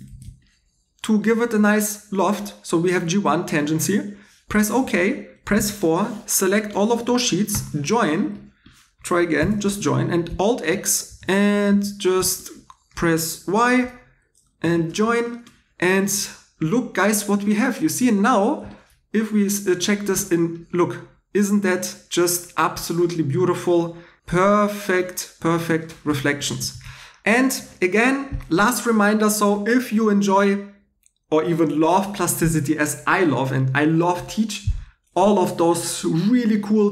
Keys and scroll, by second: 0.1 shift+e, 5.6 4, 7.5 k, 9.4 j, 10.5 super+x, 11.1 typing, 13.8-14.6 typing, 26.1 alt+e.